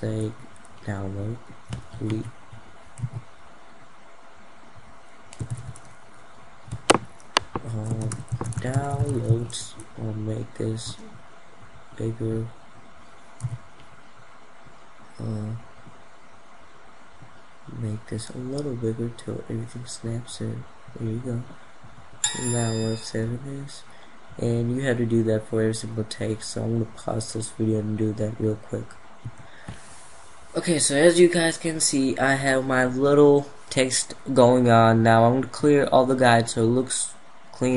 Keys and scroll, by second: 5.1 ctrl+a, 28.7 F2.